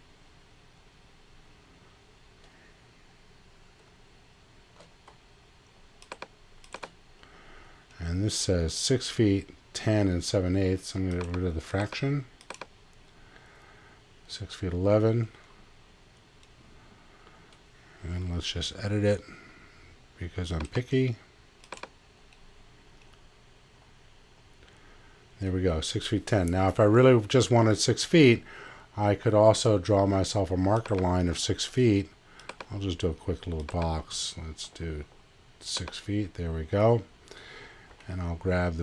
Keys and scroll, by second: 18.2 x, 37.9 x.